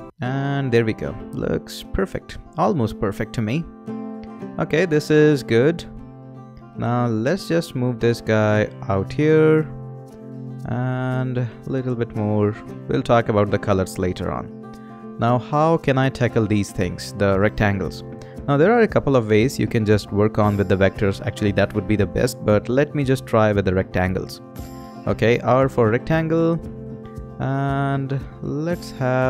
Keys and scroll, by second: 0.0 Right, 1.7 Up, 24.5 r.